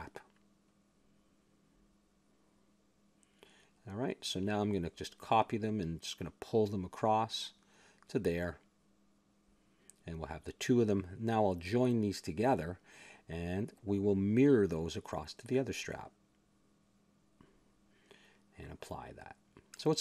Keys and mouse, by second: 0.4 click, 1.5 click, 2.0 ctrl+j, 3.9 click, 4.8 KP_7, 6.3 shift+d, 7.2 click, 8.0 g, 11.2 a, 12.4-13.9 drag, 13.8 ctrl+j, 14.5 click, 15.5 middle click, 16.0 click, 17.5 click, 18.2 middle click, 18.6 a, 18.8 middle click.